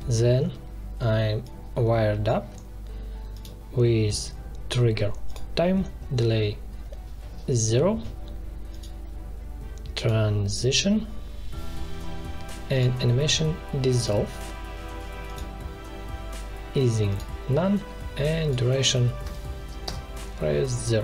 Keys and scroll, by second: 19.2 0, 19.8 Return.